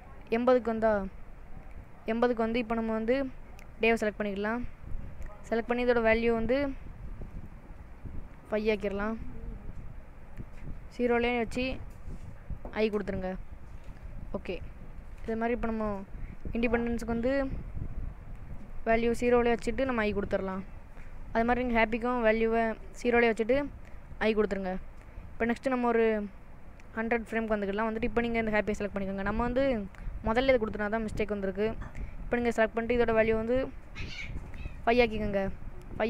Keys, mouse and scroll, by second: 0.7 click, 1.8 click, 2.7 middle click, 3.9 click, 7.4 click, 14.4 i, 15.9 click, 18.6 click, 20.6 i, 21.6 click, 24.2 i, 27.0 click, 28.0 click, 30.0 middle click, 33.2 click.